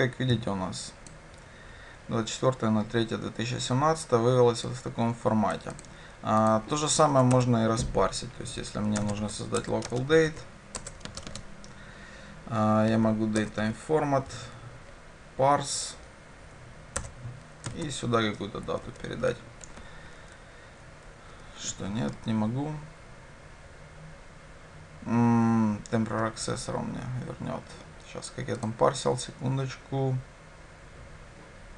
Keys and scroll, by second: 9.7 Return.